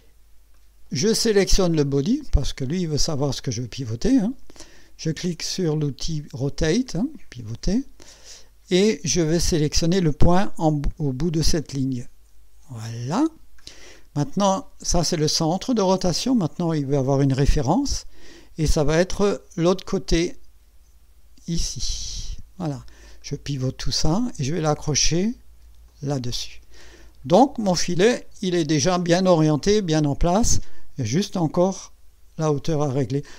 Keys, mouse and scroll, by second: 0.6 right click, 2.9 click, 6.8 click, 8.1-8.5 scroll up 1, 12.8 click, 13.6-14.0 scroll down 1, 14.0 scroll up 1, 14.9 right click, 21.9 click, 23.2 right click, 25.8 click, 26.9 scroll down 2, 27.6-29.3 right drag, 28.8 middle click.